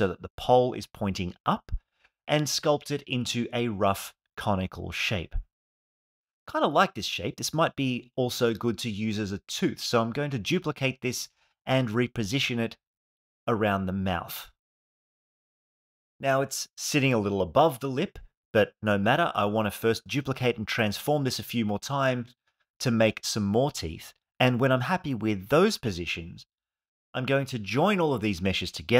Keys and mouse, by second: 0.3 f, 2.5 click, 3.1 click, 3.6 click, 5.1 alt+middle click, 5.8 KP_1, 6.4 ctrl+Tab, 7.4 click, 8.9 shift+d, 10.1 click, 10.5-11.3 middle drag, 11.7 g, 11.9 y, 13.2 click, 13.7 KP_1, 14.9 r, 16.0 s, 18.0 g, 19.3 click, 20.0 r, 20.6 click, 21.3-27.5 typing, 23.3 click, 28.4 shift+click, 28.6 shift+click.